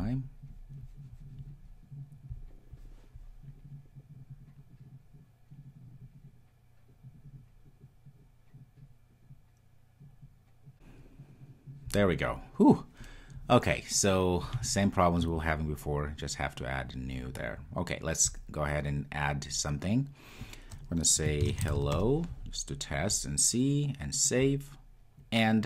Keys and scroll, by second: 10.7 ctrl+r.